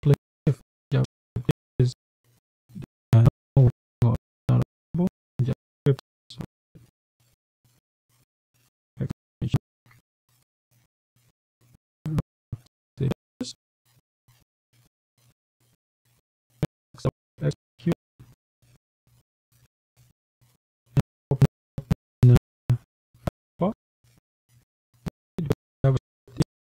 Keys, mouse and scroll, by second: 0.0-7.8 typing, 9.1 shift+1, 11.4-11.9 scroll down 2, 13.3 click, 14.9 click, 17.3 click, 19.8 click, 21.8-23.1 drag, 24.6 click, 25.9 click.